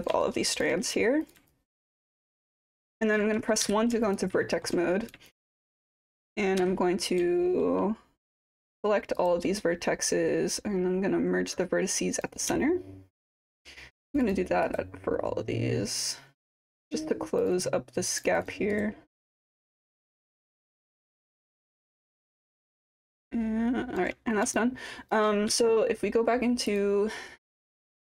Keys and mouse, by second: 0.0 click, 0.2 alt+click, 1.2 click, 1.5 alt+click, 2.1 alt+middle click, 2.8 alt+click, 3.6 1, 4.0 alt+click, 4.4 alt+middle click, 5.3 alt+click, 6.6 q, 7.4 alt+middle click, 8.2 click, 8.4 click, 9.2 click, 12.6 alt+middle click, 14.1 click, 14.2 click, 14.6-16.7 right drag, 17.4 click, 17.6 click, 18.1 click, 18.3 click, 18.4 click, 18.8-20.1 right drag, 21.1 click, 21.5-22.6 right drag, 22.9-24.0 alt+drag, 24.5 alt+click, 25.5 4, 26.7 click, 27.6 click, 28.0-28.1 alt+drag.